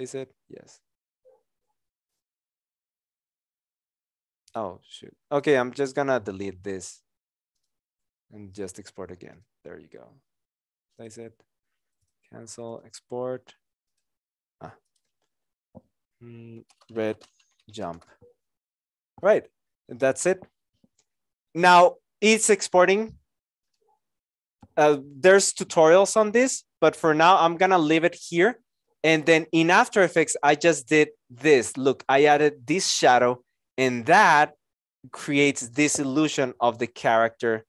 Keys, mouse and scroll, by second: 6.2 Delete, 16.1 Delete, 16.4-18.3 typing, 36.3 KP_0.